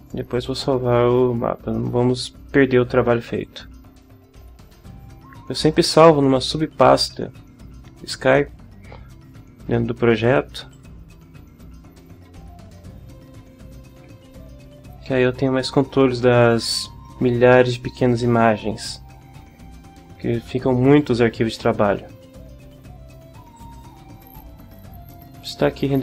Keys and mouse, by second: 0.3 click, 3.3 click, 10.7 click, 14.1 alt+Tab, 23.6 click.